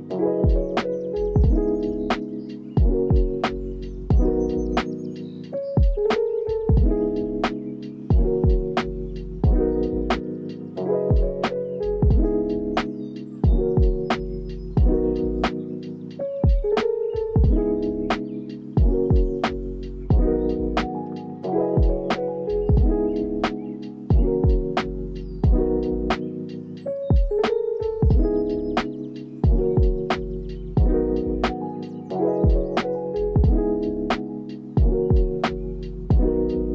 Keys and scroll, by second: 1.3 ctrl+s, 9.5 ctrl+s, 14.6 alt+z, 22.1 ctrl+s, 25.1 z, 27.9 x, 31.0 z, 36.0 ctrl+s.